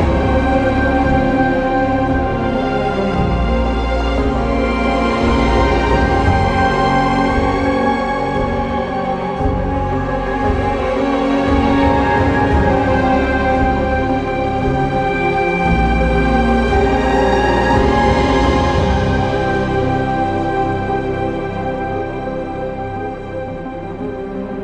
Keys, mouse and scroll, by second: 0.0-0.5 typing, 8.3-10.1 typing, 11.3-12.0 typing, 14.0 b, 15.4 b, 20.3 e, 23.0 e.